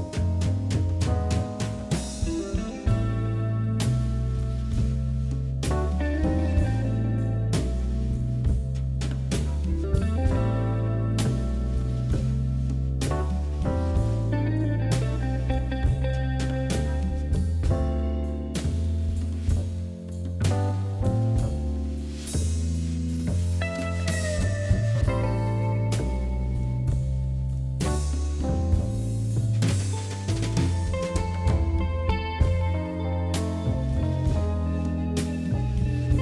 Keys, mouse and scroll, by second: 0.3 shift+click, 0.6 shift+click, 1.1-2.4 middle drag, 2.4 shift+click, 2.8 shift+click, 3.4 KP_1, 4.4 g, 6.0 click, 6.6 g, 7.8 scroll down 1, 8.0-9.3 middle drag, 9.3 scroll down 2, 9.5-11.1 middle drag, 11.8 middle click, 12.4 Tab, 12.6-13.9 middle drag, 13.9-14.8 scroll up 3, 14.1 Tab, 14.8 click, 15.7 shift+click, 16.2 KP_1, 17.0 g, 20.2 click, 21.8 g, 22.6 click, 23.0 g, 23.7 click, 24.5 shift+click, 25.0 g, 25.9 Tab, 26.1 middle click, 26.9 scroll down 1, 27.1 middle click, 27.6 KP_7, 28.0-28.5 scroll up 1, 28.5-30.1 middle drag, 30.2-31.3 middle drag, 31.3 Tab, 32.0 middle click, 32.3-33.0 scroll up 2, 33.0 KP_3, 33.3-34.2 scroll up 3, 33.5 shift+middle click, 34.2 click, 35.0 click, 35.9 KP_1.